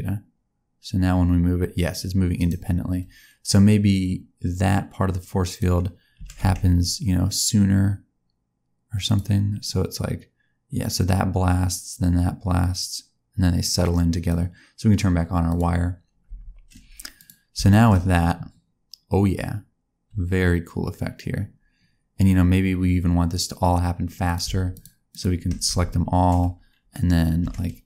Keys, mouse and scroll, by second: 3.4 click, 6.1 g, 9.6 click, 15.5 click, 16.2 space, 17.1 click, 17.6 shift+middle click, 18.0 scroll down 1, 24.2 click, 24.6 shift+click, 25.0 click, 25.6 a, 27.3 s.